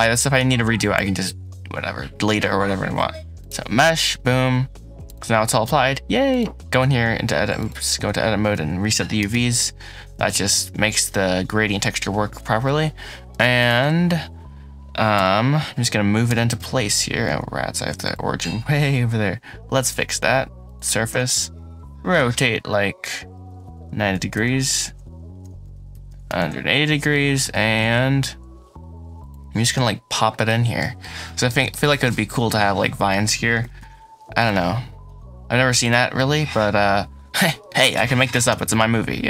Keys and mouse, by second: 0.0 ctrl+a, 0.6-3.4 drag, 6.1 click, 6.6 a, 7.4 click, 7.8 Tab, 8.4 a, 9.0 u, 10.0 Tab, 13.4 shift+click, 15.0 /, 16.1 r, 16.4 x, 17.1 Escape, 18.0-20.7 drag, 21.0 r, 21.2 x, 24.0 KP_9, 24.2 KP_0, 24.7 KP_Enter, 25.3-26.1 typing, 26.3 KP_Enter, 27.0 middle click, 27.4 g, 27.8 shift+z, 29.2 middle click, 29.6 KP_Decimal, 30.2 middle click, 30.7 middle click, 31.0 click, 31.5 shift+middle click, 33.5 g, 33.7 z, 35.0 s, 35.7 click, 36.0-37.3 middle drag.